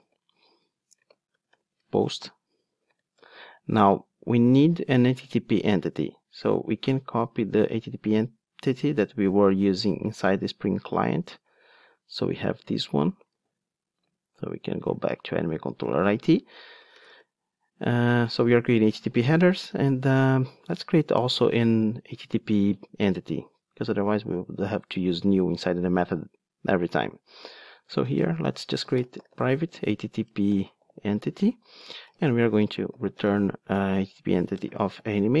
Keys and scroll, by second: 2.1 Return, 13.4 super+c, 19.6 Tab, 31.7 Return.